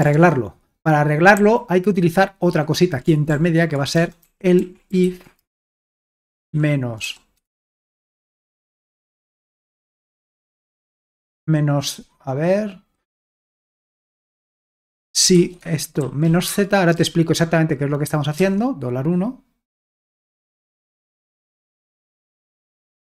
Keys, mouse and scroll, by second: 0.1 alt+Tab, 3.3-7.0 typing, 10.4-11.0 typing, 14.7-16.7 typing, 18.4 typing, 20.0-21.9 typing.